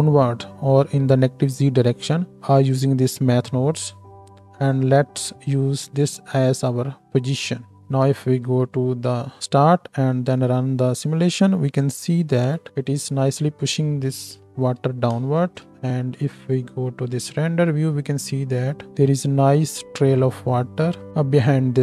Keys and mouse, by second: 8.6 shift+Left, 9.9 space, 11.2 space, 12.4 KP_1, 13.2 space, 14.9 space, 15.2 KP_0, 15.7 z, 17.4 space.